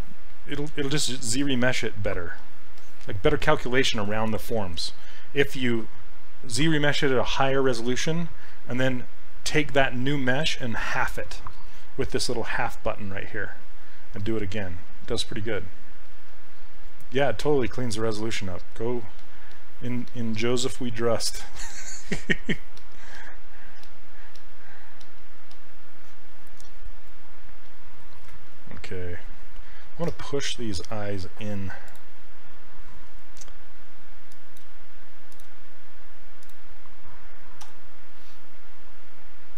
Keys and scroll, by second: 0.8 ctrl+z, 23.1 s, 23.8 s, 37.7 e.